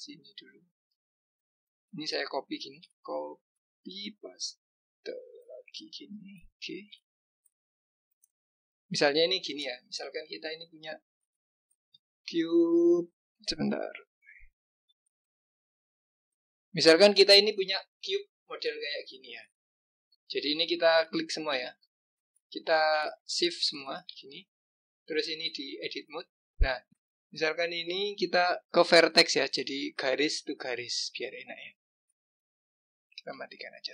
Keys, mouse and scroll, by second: 1.2 click, 1.6 click, 3.9 ctrl+c, 5.1 ctrl+v, 6.9 g, 9.4 click, 10.2 click, 12.1 ctrl+v, 14.7 g, 17.9 click, 18.8 click, 19.7 click, 20.8 click, 21.6 ctrl+click, 22.2 ctrl+click, 23.2 shift+click, 23.7 shift+click, 25.1-26.9 drag, 26.9 ctrl+z, 33.2 click.